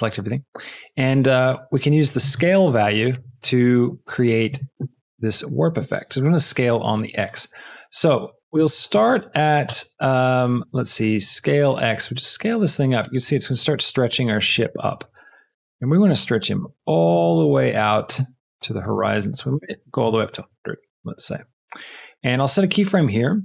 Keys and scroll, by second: 2.4 space, 7.1 space, 8.2 space, 20.0 KP_1, 20.2 KP_0, 20.4 Return.